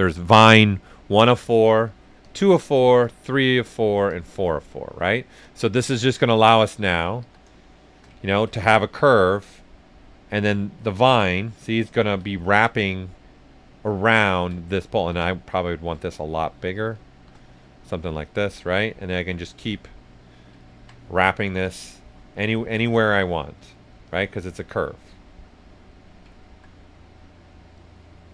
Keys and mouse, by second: 2.2 click, 6.1 right click, 7.2 s, 7.4 click, 8.1 ctrl+shift+right click, 8.6 click, 9.7 right click, 10.2 ctrl+right click, 11.8 ctrl+right click, 12.2-13.7 right drag, 14.9 s, 15.0 click, 16.7 right click, 17.1 shift+f, 17.4 right click, 18.9 click, 19.8 right click, 21.6 click, 22.3 right click, 22.9 ctrl+z, 24.0 click, 24.8 right click, 26.3 alt+right click, 26.7 right click, 27.7 click.